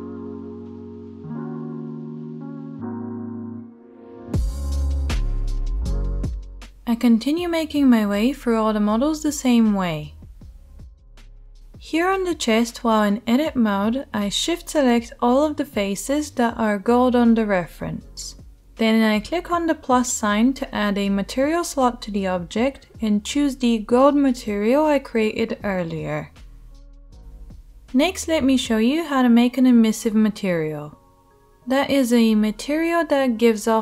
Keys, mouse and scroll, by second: 0.1-4.1 middle drag, 3.4 Tab, 4.1 shift+right click, 4.2 Tab, 4.7 middle click, 5.2-6.7 right drag, 5.5 g, 6.2 g, 6.7 click, 6.9 Tab, 6.9-8.0 middle drag, 6.9 right click, 7.6 click, 7.6 right click, 8.0 shift+right click, 8.1 Tab, 8.3 shift+middle click, 8.4 shift+right click, 8.7 middle click, 9.3-10.6 right drag, 10.6 middle click, 11.0 Tab, 11.2-15.2 shift+right drag, 12.7 Tab, 14.0 q, 14.3 a, 14.8 ctrl+click, 14.8-26.4 ctrl+middle drag, 18.7 /, 26.1 Tab, 26.4-29.0 right drag, 27.1 /, 29.0 middle click, 29.1-33.8 right drag.